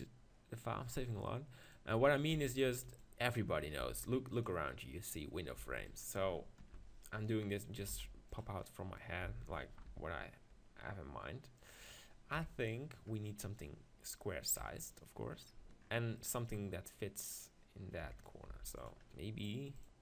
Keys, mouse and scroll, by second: 0.7-2.1 middle drag, 2.1-3.5 drag, 3.8 g, 4.4-6.6 drag, 5.6 g, 7.9 s, 9.2 s, 12.3 KP_1, 14.6 KP_7, 15.3-17.8 middle drag, 18.0 KP_7, 18.1 middle click, 18.5 x.